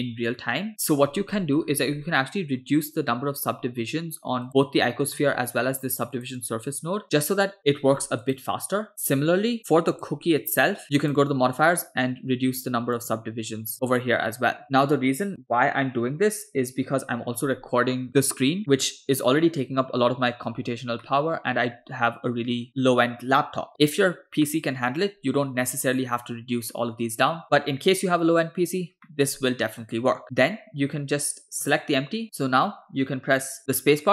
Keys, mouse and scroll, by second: 0.7 middle click, 1.4 middle click, 1.6-4.4 scroll up 3, 4.4 scroll up 1, 4.5 drag, 4.9 middle click, 6.2 click, 8.3 click, 10.0 click, 11.0 click, 13.0 click, 13.9 click, 14.6 click, 21.1-22.7 middle drag, 24.5-25.2 middle drag, 29.1-30.0 middle drag, 31.6 click, 32.2 a, 32.2 x.